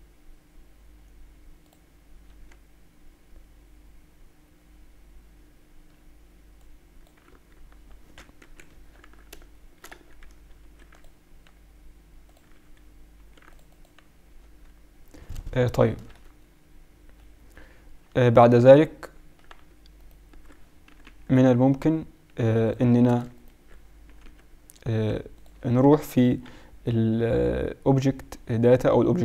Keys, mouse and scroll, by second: 2.3 Tab, 6.6 click, 7.6 ctrl+z, 8.4 KP_1, 8.7 Tab, 9.0 z, 9.8 z, 10.6 ctrl+r, 13.1 ctrl+r, 14.5 Tab, 15.8 click, 16.1 Tab, 18.9 z, 19.2 z, 19.9-21.9 drag, 20.9 g, 23.0 a, 23.3-25.0 drag, 24.0 g, 25.7 Tab, 26.4 Tab.